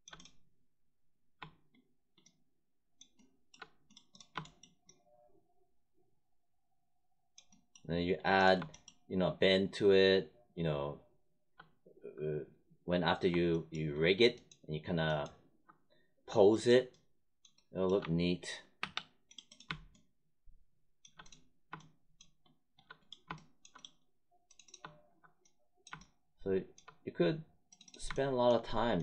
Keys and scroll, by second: 17.9 1, 18.7 3.